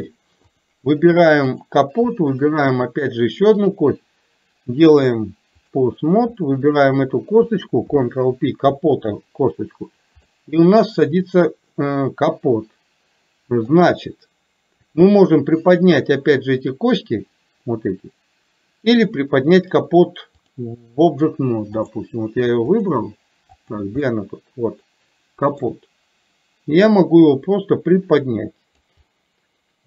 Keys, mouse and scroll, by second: 1.5 click, 2.3 shift+click, 3.6-5.9 drag, 10.4-13.8 middle drag, 20.5 click, 21.9 click, 22.9 click, 23.6 click, 24.1-25.8 middle drag, 27.0-29.0 drag, 29.1-29.8 middle drag.